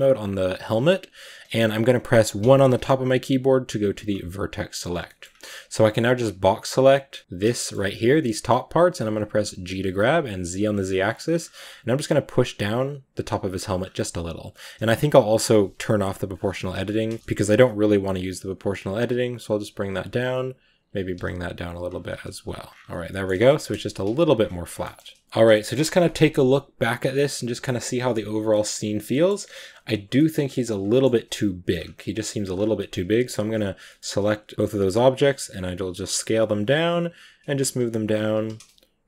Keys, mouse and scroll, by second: 0.5 a, 2.3 1, 4.7 b, 4.9 shift+middle click, 5.1 scroll up 1, 7.2 b, 7.4 shift+middle click, 7.5-8.6 scroll up 3, 9.0 g, 16.2 click, 17.0 shift+middle click, 17.1 scroll up 2, 17.3 g, 20.4 right click, 20.9 g, 22.0 z, 22.2-22.7 scroll down 10, 22.7 a, 22.9 shift+middle click, 23.6 KP_0, 24.2-24.7 scroll down 10, 24.7 shift+middle click, 25.4 shift+middle click, 25.7 a, 28.4-29.5 shift+middle drag, 29.5-30.8 scroll up 3, 30.0 shift+middle drag, 30.8 shift+middle click, 31.6-32.0 scroll up 3, 32.0-32.3 scroll down 2, 32.3-32.8 scroll up 3, 32.8 right click, 33.7-34.1 shift+middle drag, 34.1 s, 34.7-37.8 drag, 35.3 g, 37.5 s, 38.1 g.